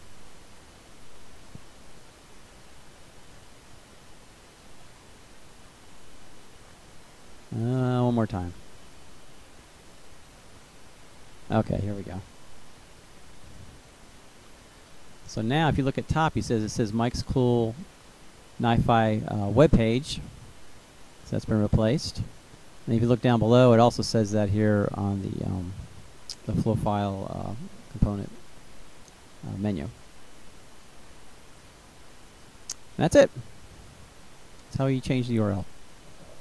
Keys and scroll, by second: 8.9 Return.